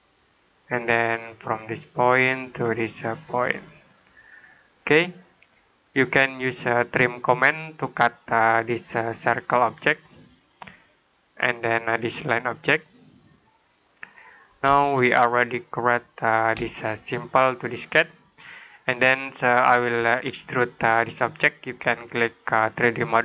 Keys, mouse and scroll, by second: 5.2 middle click, 7.7 click, 14.8 middle click, 16.7 middle click, 22.9 click.